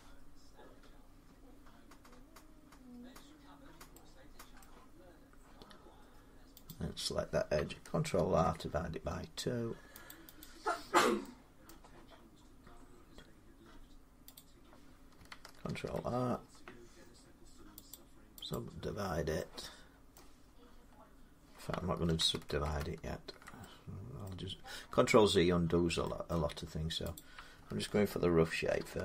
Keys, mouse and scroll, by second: 4.4 middle click, 4.8 scroll down 3, 6.4 click, 7.5-7.9 scroll, 7.9 ctrl+r, 9.1-9.4 scroll up 1, 9.9 click, 10.2 click, 11.3 middle click, 11.4 middle click, 14.3 click, 15.4 ctrl+r, 16.1-17.5 scroll, 17.7 middle click, 17.7 click, 18.3 click, 19.9 middle click, 21.8 ctrl+z, 22.1 ctrl+z, 22.4 ctrl+z, 24.0 middle click, 26.1 middle click, 26.9 click, 28.6 ctrl+r.